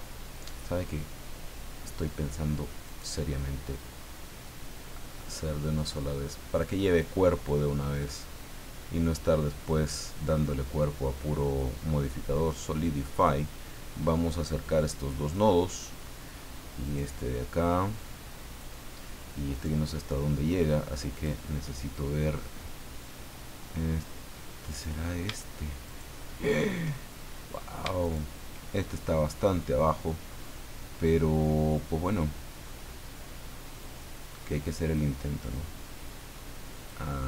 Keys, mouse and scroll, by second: 2.8 right click, 3.8-7.2 drag, 8.0 right click, 9.2-13.4 drag, 14.0-15.5 drag, 16.8 right click, 17.6 click, 19.5 right click, 21.1 click, 24.7 right click, 25.8 shift+right click, 28.0 shift+right click, 33.8-35.1 drag, 35.5-37.1 drag.